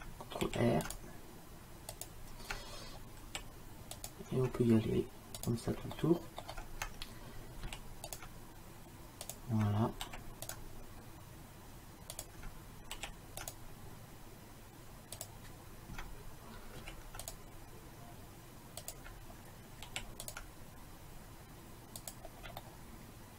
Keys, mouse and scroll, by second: 0.5 ctrl+r, 3.3 ctrl+r, 6.0 middle click, 6.2 middle click, 6.4 middle click, 7.7 ctrl+r, 10.1 ctrl+r, 13.0 ctrl+r, 16.9 ctrl+r, 19.9 ctrl+r, 22.8 middle click.